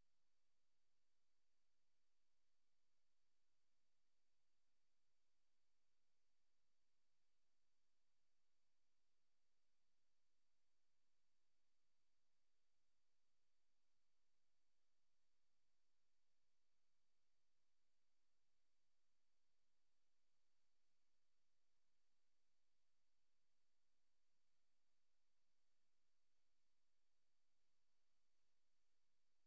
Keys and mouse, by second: 0.0 g, 1.9 z, 2.5-3.5 drag, 3.5 s, 3.7 z, 6.0 click, 6.8-8.0 typing, 8.7 shift+click, 9.3-9.8 typing, 11.4 click, 12.2 click, 13.1 click, 13.5 click, 14.3 click, 15.1 click, 15.2 typing, 19.8 click, 20.7 click, 22.5 ctrl+z, 25.0-26.0 drag, 26.8 ctrl+z.